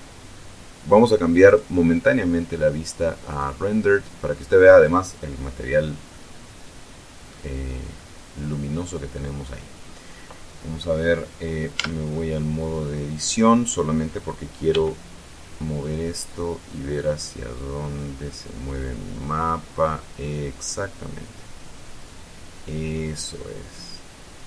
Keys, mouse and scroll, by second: 1.6 click, 3.3 click, 6.2-7.6 middle drag, 7.6-8.1 scroll up 1, 8.1-8.8 scroll up 1, 11.8 Tab, 14.8 g.